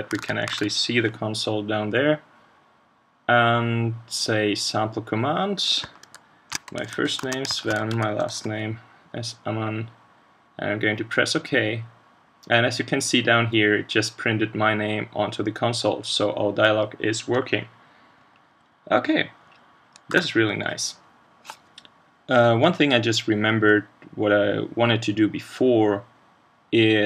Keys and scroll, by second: 0.2 super+Tab, 0.6 super+Tab, 20.1 super+q.